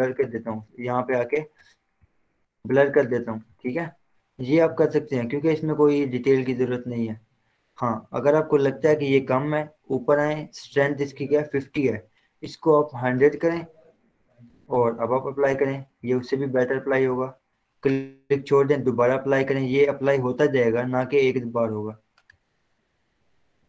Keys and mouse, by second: 0.5 ctrl+z, 2.1-13.8 drag, 13.8 Return, 14.9-16.8 drag.